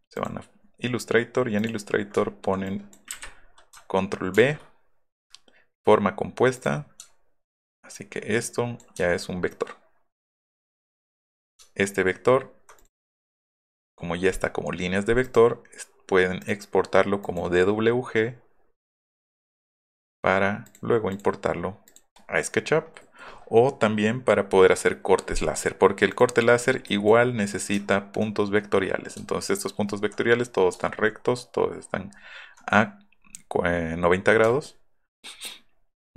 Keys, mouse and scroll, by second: 0.2 click, 1.6 click, 2.7 click, 3.2 Delete, 4.4 ctrl+v, 6.6 click, 7.3 alt+middle click, 7.9 click, 9.1 alt+middle click, 9.1 alt+scroll, 9.3 alt+middle click, 10.0 alt+middle click, 11.7 alt+scroll up 1, 12.4 alt+scroll up 1, 12.8 click, 13.3 click, 15.2 click, 16.4 click, 17.2 click, 20.7 click, 21.1 click, 21.9 click, 22.8 middle click, 23.0 middle click, 26.1 click, 30.8 alt+middle click, 31.0 alt+middle click, 34.6 alt+middle click, 35.1 alt+middle click, 35.7 alt+middle click.